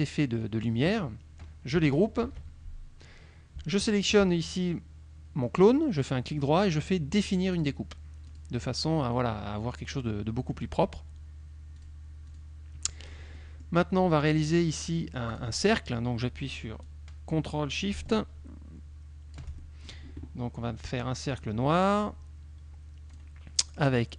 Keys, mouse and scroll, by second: 2.3 ctrl+g, 3.8 shift+click, 6.1 right click, 7.6 click, 8.4 click, 11.8 click, 12.4 click, 13.1 click, 13.6 middle click, 13.7 click, 14.1 click, 14.4 middle click, 15.4 click, 16.9-20.2 drag, 21.4 click, 21.8 middle click, 23.2 click.